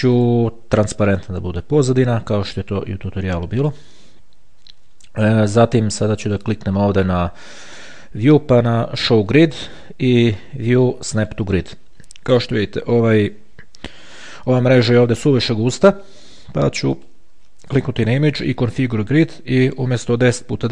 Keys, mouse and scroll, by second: 0.4 click, 1.3 click, 3.8 click, 6.5 click, 9.5 click, 10.3 click, 11.4 click, 14.3-14.9 ctrl+scroll up 2, 14.9-15.3 ctrl+scroll down 2, 15.3-16.1 ctrl+scroll up 1, 16.1-16.6 ctrl+scroll down 1, 17.1 click, 19.3 click, 20.3 click.